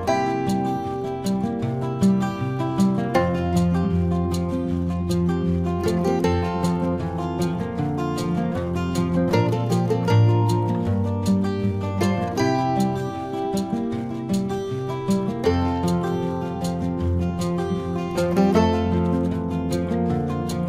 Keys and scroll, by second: 15.8 ctrl+alt+z, 18.4 ctrl+alt+z.